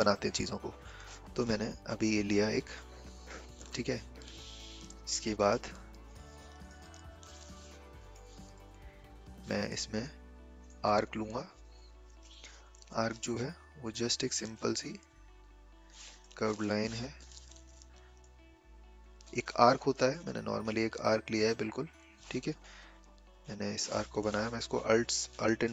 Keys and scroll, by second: 5.9 v, 17.2 ctrl+z, 22.5 v.